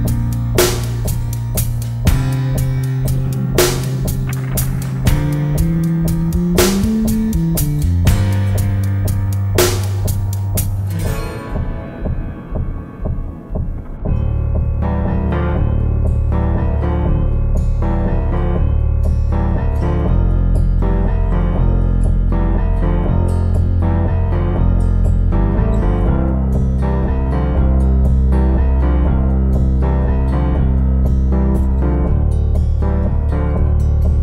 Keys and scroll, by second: 12.0 super+d, 18.7 shift+super+g, 33.0 BackSpace.